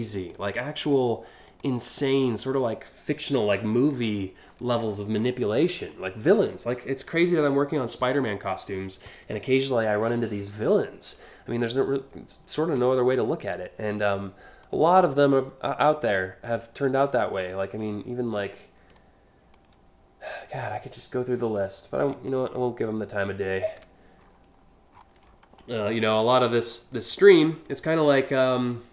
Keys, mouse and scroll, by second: 0.4 click, 1.1 click, 1.6 click, 4.6 scroll down 2, 5.1 scroll down 1, 5.5-5.9 scroll up 4, 9.2 scroll down 1, 9.9 scroll up 1, 11.1 click, 12.3 p, 14.2-15.3 drag, 16.4-17.5 drag, 18.5 alt+click, 20.3 click, 22.0-23.2 ctrl+drag, 23.8 scroll up 3, 24.5 scroll down 1, 24.8-25.3 alt+scroll up 3, 25.7 scroll down 3, 26.1 alt+scroll up 2, 27.4-28.7 ctrl+drag.